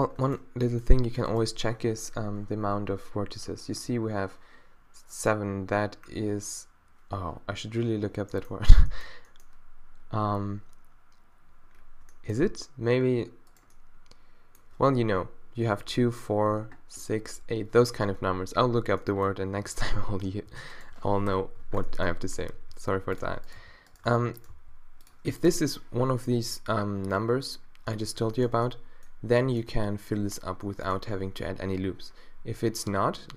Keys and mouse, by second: 1.3-3.3 drag, 13.5-19.2 middle drag, 19.6 g, 21.3 -, 22.4 g, 23.5-24.5 drag, 23.6 g, 24.7 d, 30.7 middle click.